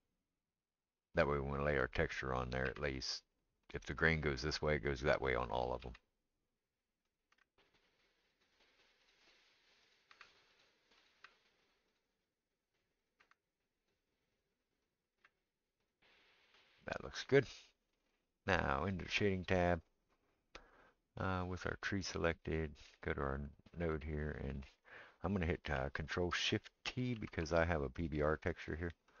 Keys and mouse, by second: 1.7 click, 2.6 r, 5.8 g, 7.1 click, 7.1 middle click, 7.3 g, 9.1 click, 9.1 middle click, 9.8 click, 10.1 g, 11.1 g, 11.1 middle click, 12.0-29.2 right drag, 13.0 click, 13.2 g, 14.9 click, 15.1 g, 18.9 click, 18.9 middle click, 20.7-23.4 middle drag, 24.3 click, 24.3 middle click, 27.2 ctrl+shift+t.